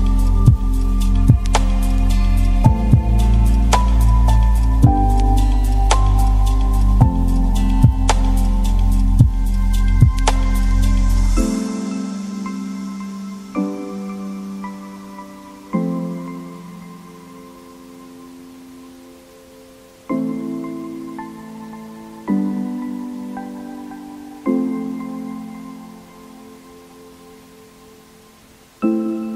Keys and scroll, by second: 17.3 Left.